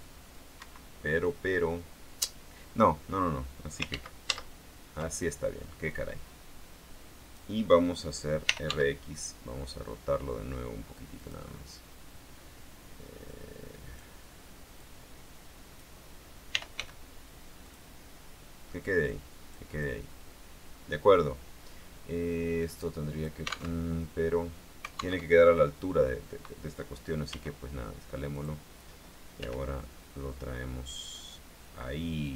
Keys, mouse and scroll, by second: 0.8 Escape, 4.0 ctrl+z, 6.0-7.7 drag, 8.3-9.3 typing, 11.3 click, 13.4 click, 15.0-16.1 drag, 16.4-17.4 typing, 17.8 click, 19.2 click, 20.0-23.6 drag, 23.9 alt+Tab, 25.3 alt+Tab, 27.4 s, 28.5 click, 29.6 g.